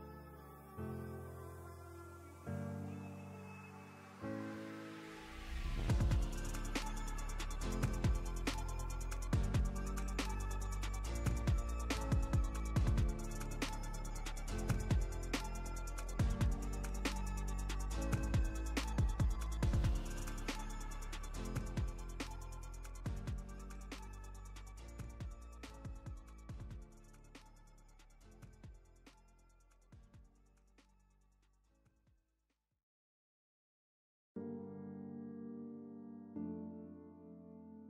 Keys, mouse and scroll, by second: 3.1-3.7 drag, 6.2-6.5 shift+drag, 9.9-11.4 drag, 14.9-15.5 drag, 22.8 click, 27.2 click, 28.4-30.5 alt+shift+drag, 30.8-32.0 drag, 34.2 space, 34.3-34.8 click, 34.5 space, 35.0 click, 35.6-36.1 alt+drag.